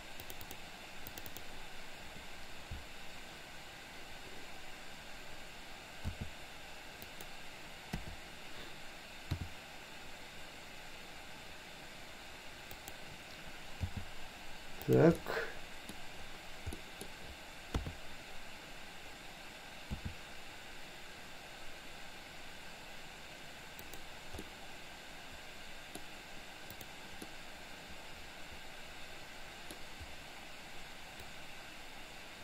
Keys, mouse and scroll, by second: 6.2 s, 8.0 KP_7, 9.3 r, 14.0 g, 15.2-16.0 middle drag, 16.8-17.2 middle drag, 17.7 KP_3, 20.0 s, 24.3 scroll up 2, 24.6-26.0 middle drag, 26.0 scroll down 2, 27.3-29.7 middle drag, 31.3-32.4 drag.